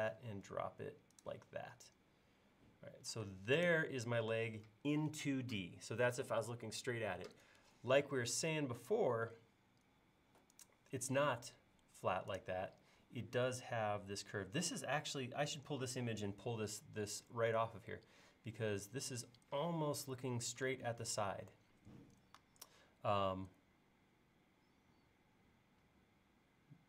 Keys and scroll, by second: 3.3 space.